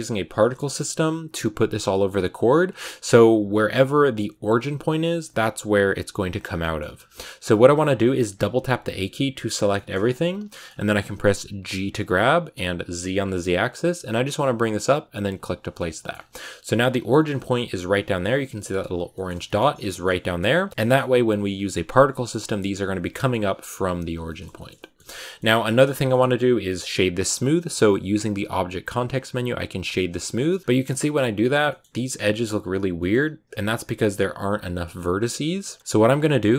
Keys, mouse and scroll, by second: 0.2 shift+middle click, 0.9-1.2 scroll down 3, 1.8 shift+middle click, 2.0-4.8 scroll up 7, 4.9 shift+middle click, 5.5-6.5 scroll down 1, 6.5 shift+middle click, 6.7-7.5 scroll up 3, 7.5 scroll up 1, 7.5-8.2 scroll down 10, 8.2 a, 8.4 a, 9.6 shift+middle click, 9.8-10.2 scroll up 5, 10.4 shift+middle click, 10.5-11.6 scroll up 3, 11.6 g, 15.4 scroll down 3, 15.6 middle click, 16.0 scroll up 2, 17.0 middle click, 17.2 Tab, 18.5 middle click, 18.7-19.0 scroll down 4, 19.0 middle click, 19.5 scroll down 1, 19.7 middle click, 20.5 scroll down 1, 20.7 middle click, 20.8-22.8 scroll up 1, 22.8 scroll up 1, 23.0 middle click, 23.9 scroll down 1, 24.1 shift+middle click, 24.9 scroll up 1, 25.1-29.8 middle drag, 29.8 w, 30.2 shift+middle click, 30.6 scroll up 2, 30.7-33.1 shift+middle drag, 33.1-33.5 scroll up 1, 33.5 Tab, 35.0-35.5 scroll down 1, 35.5-36.5 middle drag.